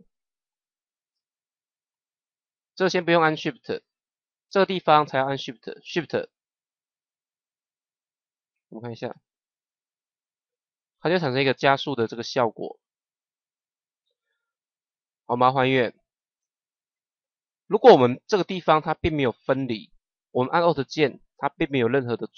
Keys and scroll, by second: 9.0 KP_0.